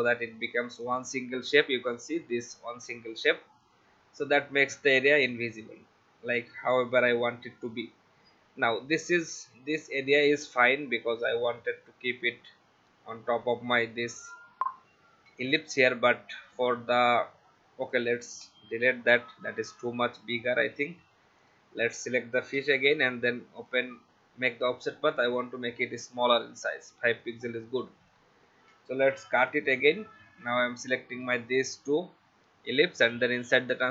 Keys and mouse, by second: 0.8 click, 2.7 ctrl+z, 3.6 click, 17.8 click, 18.4 Delete, 19.9 click, 21.4 click, 22.5 ctrl+alt+f, 23.6 click, 27.2 click, 29.3 ctrl+x, 31.1 click, 33.0 click.